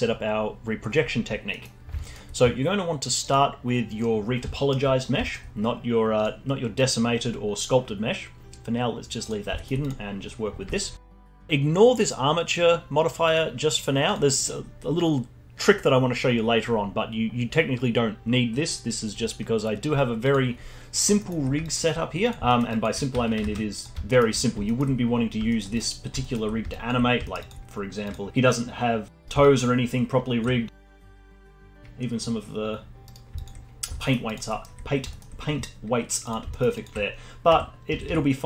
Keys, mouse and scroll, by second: 1.5 middle click, 2.0-3.2 alt+middle drag, 3.2 click, 4.2-4.5 scroll up 1, 4.5-4.9 alt+middle drag, 4.9 scroll down 1, 5.2 alt+middle click, 6.2 drag, 6.7 click, 9.2 click, 9.5 alt+middle click, 9.8 click, 10.3-10.7 scroll down 1, 10.7-13.2 alt+middle drag, 13.2 click, 20.2 click, 20.8 scroll up 1, 21.1-21.6 alt+middle drag, 21.6-22.2 alt+drag, 22.4 alt+middle drag, 22.7 alt+click, 23.4 Tab, 24.0-25.7 alt+middle drag, 25.7 click, 26.2 alt+middle click, 26.7 alt+click, 27.0 scroll up 2, 27.2 alt+middle click, 27.4 alt+click, 27.6-28.0 scroll up 1, 28.0 click, 28.4 r, 30.8 alt+click, 30.9 r, 33.3-33.7 alt+drag, 33.7 scroll down 1, 33.9 alt+middle drag, 34.2 alt+drag, 34.4-36.2 alt+middle drag, 36.2 click, 36.5 alt+middle drag, 36.7-37.4 alt+drag, 37.4 r.